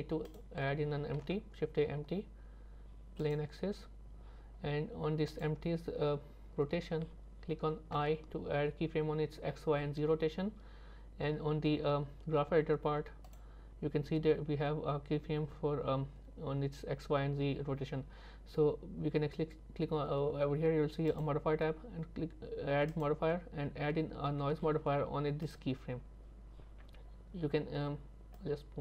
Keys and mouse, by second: 1.2 shift+a, 13.3 click, 21.2-25.5 drag, 28.4 click, 28.7 click.